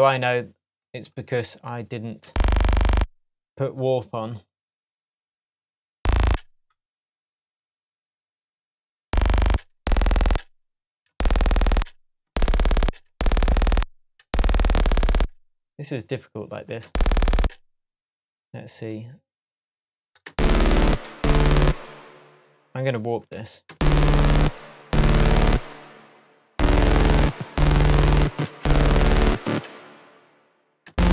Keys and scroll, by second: 2.2 space, 6.2 space, 9.0 space, 16.8 space, 20.3 super+space, 20.8 space, 23.7 space, 30.9 space.